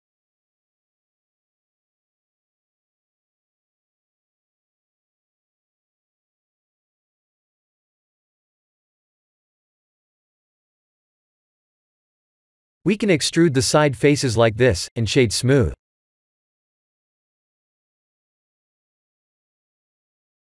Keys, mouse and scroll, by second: 1.9 KP_1, 3.0 KP_7, 4.0 KP_3, 4.9-6.1 scroll down 2, 6.1-6.6 scroll down 3, 6.6 c, 10.1 c, 12.7 middle click, 13.2 middle click, 13.3 middle click, 13.7 middle click, 14.8 KP_7, 15.2 KP_1, 16.1 e, 18.8 g, 20.1 r.